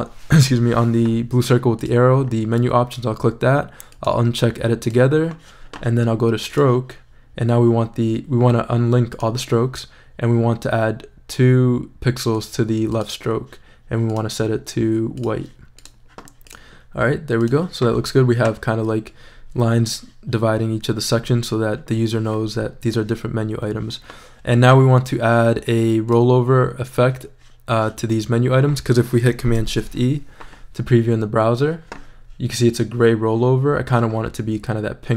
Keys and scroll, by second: 29.6 shift+super+e.